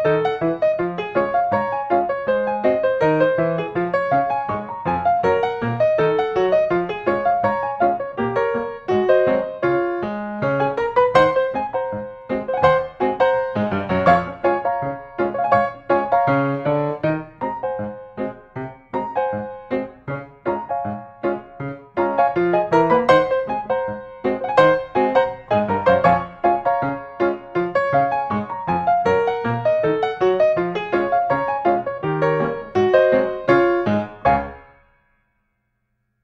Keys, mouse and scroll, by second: 3.7 click, 4.6 5, 4.9 Return, 7.6 click, 9.6-10.5 scroll, 11.0 click, 13.2-14.3 middle drag, 13.2-13.6 scroll, 14.2 scroll up 1, 15.7-16.9 drag, 17.3-17.6 scroll, 18.8 click, 19.5-20.0 scroll, 20.7 middle click, 22.3 click, 25.6 click, 26.5 scroll down 2, 26.8 scroll, 28.3 click, 30.2 click, 31.0-31.7 typing, 33.4-34.4 scroll, 35.2 click.